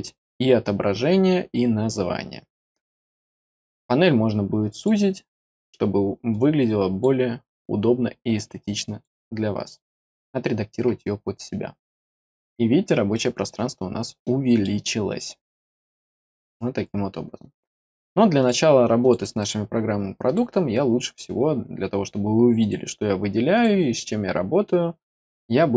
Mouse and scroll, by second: 3.5-4.8 drag, 6.3 click, 8.6 click, 13.4-14.2 scroll down 2, 14.2 middle click, 18.3 click, 19.0 click, 19.3 right click, 20.2 click, 22.6 click, 23.5 click, 25.2 click.